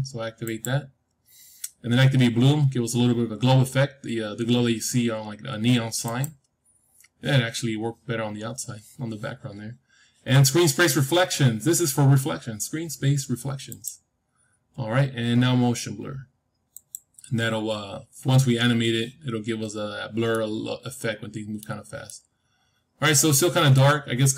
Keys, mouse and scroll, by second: 0.4-2.4 drag, 6.0-8.0 drag, 8.1-10.1 scroll up 1, 10.2-12.3 scroll up 1, 13.6-15.6 drag, 16.7-18.6 drag, 19.6-20.2 scroll up 1, 20.2-24.3 middle drag.